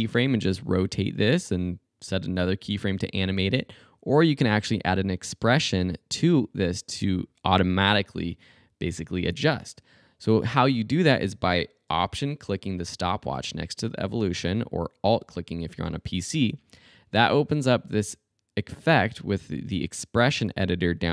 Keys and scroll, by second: 3.4 super+z.